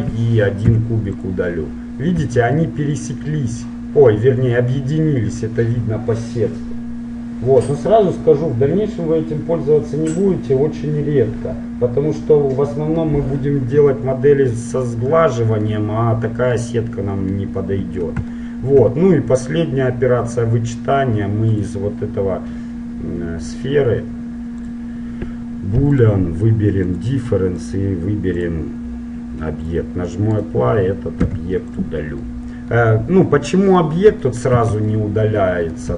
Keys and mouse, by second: 1.3 Delete, 2.4 z, 10.6-14.1 middle drag, 14.7-19.6 middle drag, 19.6-21.1 right drag, 21.1 middle click, 21.7-23.6 drag, 26.0-29.4 drag, 29.8 click, 30.4 right click, 31.3 Delete, 34.8 z.